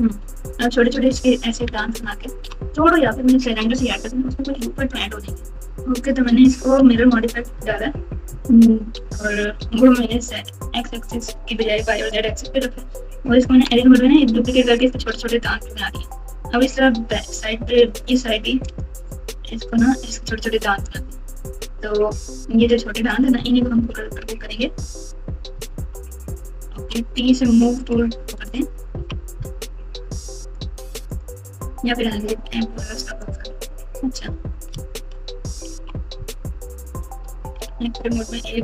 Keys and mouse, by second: 0.4 KP_8, 2.0 ctrl+KP_8, 2.3 ctrl+KP_8, 2.4 ctrl+KP_8, 4.5 KP_7, 6.4-9.8 typing, 13.7 Tab, 15.1 Tab, 18.6 click, 20.8 click, 21.6 Tab, 23.5-25.8 typing, 26.9 t, 27.9 click, 28.9 KP_6, 30.4 click, 31.1 click, 33.2 click, 34.7 KP_Add, 35.0 KP_Add, 35.6 KP_6, 35.7 KP_6, 37.6 alt+z.